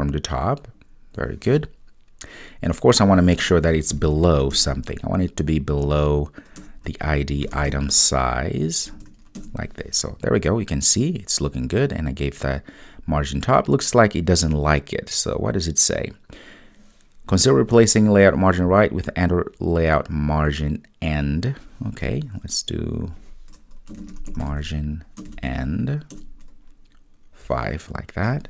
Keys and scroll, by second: 4.5 Return, 26.3 Return.